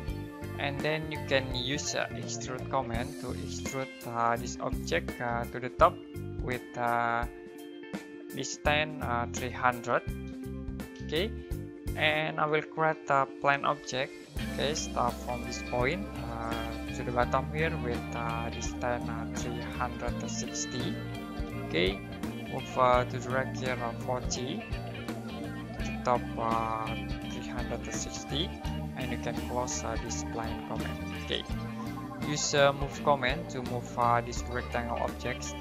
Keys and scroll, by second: 1.6-3.5 typing, 10.0-10.9 typing, 13.1-14.7 typing, 20.0-21.4 typing, 23.7-25.0 typing, 27.0-28.6 typing, 29.7-30.7 typing, 32.3-33.2 typing, 35.0 space.